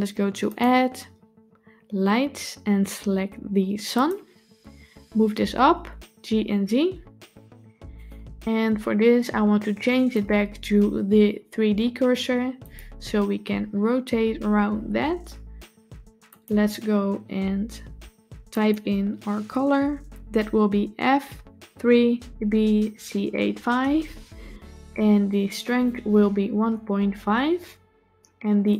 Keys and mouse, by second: 0.3-4.0 drag, 5.4 g, 10.1-12.6 drag, 16.1 click, 25.5-27.1 drag, 28.5-28.7 drag.